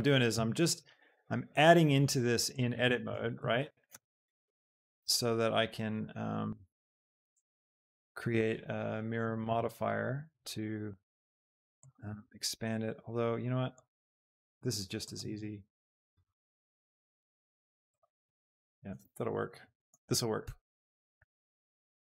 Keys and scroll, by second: 0.2 Escape, 1.0 g, 3.5 Escape, 3.5 shift+d, 3.9 g, 7.2 shift+d, 9.8 shift+d, 12.3 shift+d, 15.3 shift+d, 18.9 Tab, 20.4 s, 21.1 s.